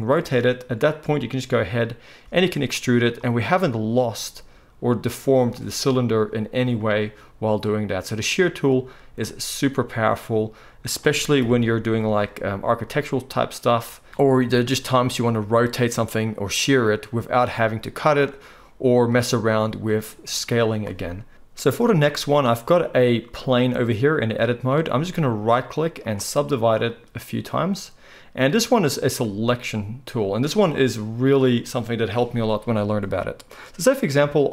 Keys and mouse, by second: 2.2 e, 3.1-25.3 middle drag, 11.4 KP_1, 25.3-33.2 right drag, 26.8-33.2 drag, 32.4-34.5 middle drag.